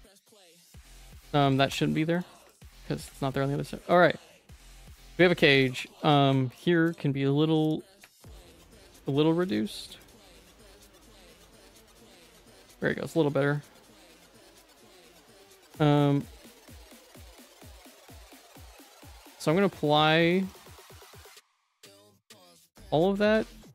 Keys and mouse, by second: 0.7 Tab, 0.9 2, 1.1 click, 1.4 ctrl+x, 1.7 Tab, 2.1 shift+click, 3.6 ctrl+s, 3.8 middle click, 4.7 click, 5.0 middle click, 5.8 Tab, 6.0 2, 6.5 alt+click, 7.6 alt+shift+click, 8.3 click, 8.5 alt+click, 10.5 alt+shift+click, 11.1 alt+shift+click, 11.5 ctrl+x, 11.8 Tab, 12.1 middle click, 12.9 ctrl+s, 13.4 middle click, 14.0 middle click, 14.9 q, 18.5 ctrl+s, 19.3 click, 20.5 right click, 22.3 ctrl+a, 22.4 ctrl+a, 22.8 Tab, 23.0 a, 23.3 3.